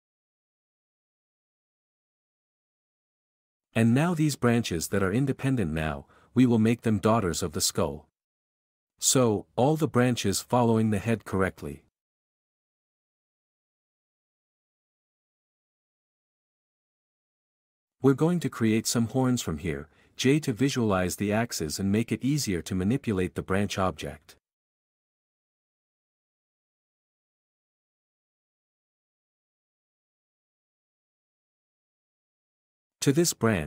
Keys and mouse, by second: 1.8 g, 3.5 Escape, 8.5 q, 11.3 shift+g, 11.5 Escape, 11.9 q, 12.0 alt+click, 12.3 shift+click, 13.2 shift+q, 14.1 click, 14.3-16.3 typing, 14.5 Escape, 15.1 Escape, 15.5 alt+a, 16.9 ctrl+n, 17.4-32.8 typing, 24.5 click, 31.3 click, 32.8 Tab, 33.0 click, 33.5 Tab.